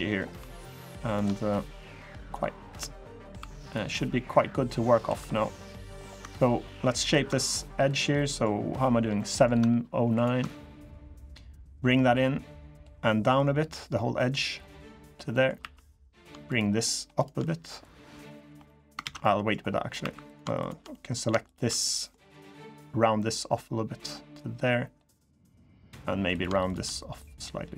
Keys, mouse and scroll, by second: 0.1 2, 0.4 click, 0.8 shift+click, 1.2 click, 2.4 click, 2.8 middle click, 3.1 3, 3.4 click, 3.6 middle click, 4.6 scroll up 2, 4.8 2, 5.0 scroll down 2, 5.3 middle click, 5.7-6.7 scroll down 2, 6.7 ctrl+click, 7.6 click, 7.9 middle click, 8.9 middle click, 8.9 scroll up 1, 9.9 ctrl+click, 10.2 middle click, 11.5 click, 13.1 click, 15.1 middle click, 15.2 scroll up 1, 15.3 3, 15.8 click, 16.2 shift+click, 16.6 shift+click, 16.9 shift+click, 17.6 click, 18.4 middle click, 18.8 ctrl+z, 19.0 middle click, 19.3 scroll up 3, 19.7 3, 20.0 click, 20.3 shift+click, 20.7 middle click, 21.2 shift+click, 21.6 middle click, 22.4 click, 25.7 middle click, 26.1 click, 26.4 shift+click, 26.9 click.